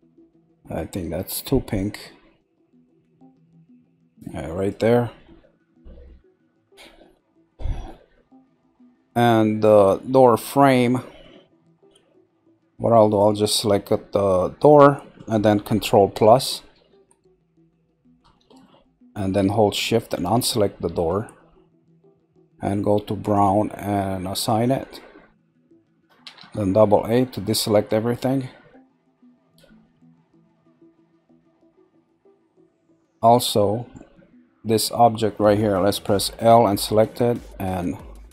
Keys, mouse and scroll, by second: 5.2 scroll down 2, 7.1 middle click, 7.8-8.6 scroll up 2, 8.6 middle click, 9.3-10.3 scroll up 2, 10.3-13.1 shift+middle drag, 13.1 click, 13.9 scroll down 2, 14.9-16.6 middle drag, 20.0 shift+click, 20.8 middle click, 21.3 scroll up 1, 23.2 click, 24.4 click, 26.2 a, 26.4 a, 26.9 scroll down 3, 27.5 middle click, 28.3-28.9 scroll up 2, 28.9-30.9 middle drag, 30.9-31.4 scroll down 1, 31.4-32.0 scroll up 3, 32.0-35.9 shift+middle drag, 36.7 click.